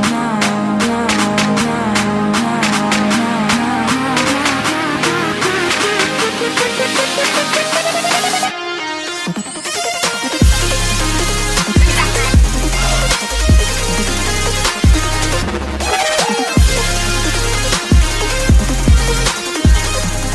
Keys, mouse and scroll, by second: 0.3 click, 5.2-6.6 typing, 7.0 Return, 7.9 click, 9.6-12.4 drag, 15.1 F10, 16.0 click, 17.6-19.9 typing.